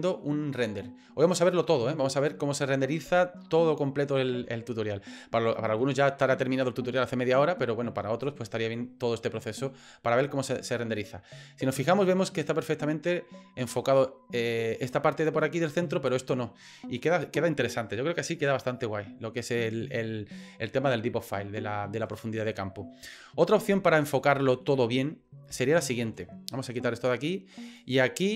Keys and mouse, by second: 23.6 middle click, 24.4 shift+middle click, 24.9 middle click, 25.8 shift+middle click, 27.0 click, 27.7 right click.